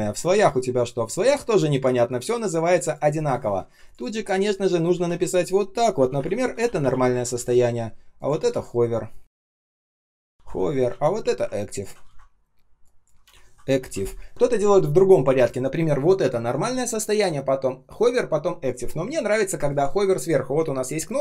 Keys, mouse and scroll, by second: 3.8 ctrl+click, 3.9 ctrl+click, 4.9 shift+;, 5.9 typing, 7.1 ctrl+a, 9.8-11.0 typing, 11.6 ctrl+click, 11.7 ctrl+a, 14.3 ctrl+s.